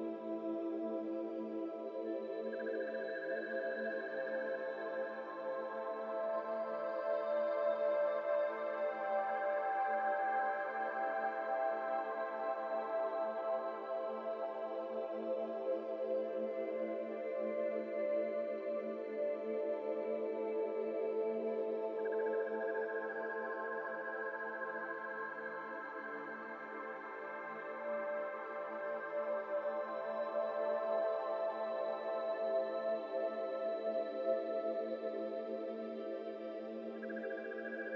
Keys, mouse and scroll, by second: 2.2 shift+middle click, 2.6-3.2 scroll up 2, 3.2 shift+middle click, 4.0 ctrl+r, 4.7 g, 6.4 ctrl+b, 12.5 shift+middle click, 12.9 alt+z, 13.5 alt+click, 13.9 alt+z, 14.6 i, 16.2 2, 16.5 alt+z, 16.8 alt+click, 17.2 middle click, 17.6 alt+z, 18.0 ctrl+b, 20.5 Tab, 20.7 scroll down 2, 20.9-21.6 middle drag, 21.6 Tab, 21.7 middle click, 22.0 Tab, 22.2-22.9 middle drag, 22.9 Tab, 23.1 middle click, 23.6 scroll down 1, 23.6 middle click, 24.1 Tab, 24.2-24.8 middle drag, 24.8 Tab, 24.9 middle click, 25.7 KP_1, 26.1 3, 26.4-27.9 scroll up 2, 27.9-29.0 shift+middle drag, 29.0 alt+z, 29.6 alt+z, 29.9 shift+click, 31.1 shift+click, 32.4-35.1 middle drag, 35.1 shift+click, 35.4-37.1 middle drag, 37.1 shift+click, 37.4-37.9 middle drag.